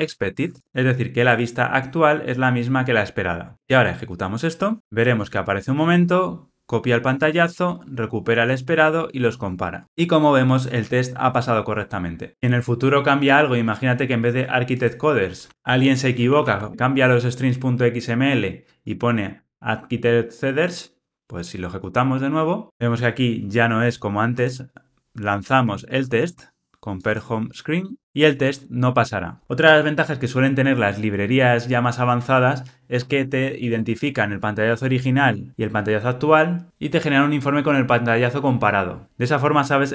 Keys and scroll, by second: 0.6 Tab, 21.9 ctrl+r.